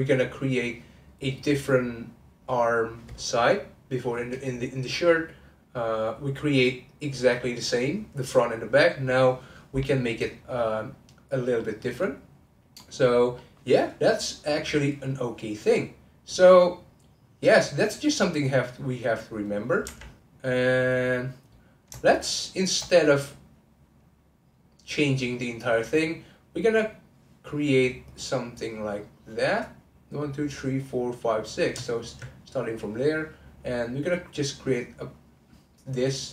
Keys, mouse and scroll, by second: 11.5 middle click, 12.4-12.8 scroll up 2, 12.8-15.8 middle drag, 17.5 click, 18.1-19.8 middle drag, 19.8 3, 20.4 click, 22.0 shift+click, 22.2 shift+click, 22.5 shift+click, 26.3 click, 27.5-31.9 middle drag, 31.9 alt+click, 32.4-33.7 middle drag, 33.7 click, 34.3 click, 36.2-36.3 middle drag.